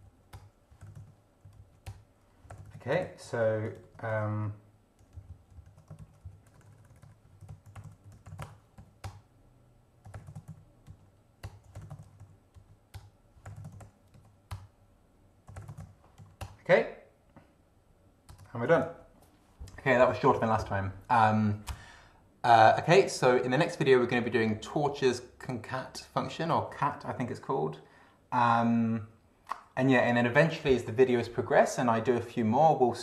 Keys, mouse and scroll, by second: 0.0 ctrl+End, 0.3 ctrl+Return, 0.7 ctrl+g, 0.8 ctrl+i, 0.9 ctrl+t, 1.0 ctrl+space, 1.4 ctrl+s, 1.8 ctrl+Return, 2.3-3.5 typing, 3.8 ctrl+Right, 4.1 ctrl+End, 5.2 ctrl+Left, 6.0 ctrl+Right, 6.2 ctrl+Left, 6.6 ctrl+BackSpace, 7.2 ctrl+t, 7.4 ctrl+e, 7.5 ctrl+n, 7.6 ctrl+s, 7.8 ctrl+o, 7.8 ctrl+r, 8.0 ctrl+f, 8.2 ctrl+l, 8.2 ctrl+o, 8.3 ctrl+w, 8.4 ctrl+BackSpace, 8.8 ctrl+End, 9.0 ctrl+Return, 9.8-16.3 typing, 11.4 Return, 13.0 Return, 14.5 Return, 16.4 Return, 18.3 Return, 18.7 ctrl+d.